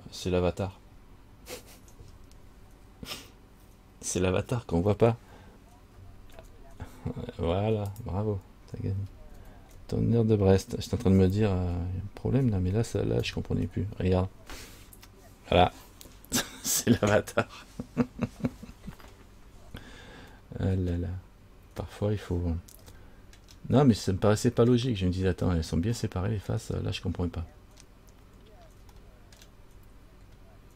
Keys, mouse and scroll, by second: 1.0-1.8 scroll down 3, 6.6 alt+h, 8.1 click, 9.6 alt+h, 11.4 Tab, 13.4 alt+h, 20.6 middle click, 21.6-23.0 scroll up 2, 23.1 shift+middle click, 24.4 middle click, 26.2 middle click, 27.7 scroll up 1, 29.1 shift+scroll up 1, 29.1 shift+middle click, 29.5 shift+scroll down 1, 30.3-30.7 scroll up 2.